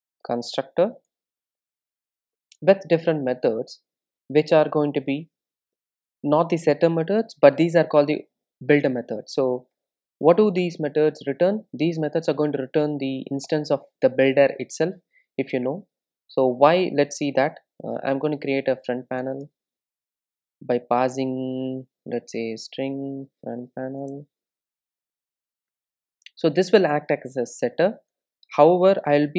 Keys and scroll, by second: 5.8 super+n, 10.3 Return, 25.7 Return.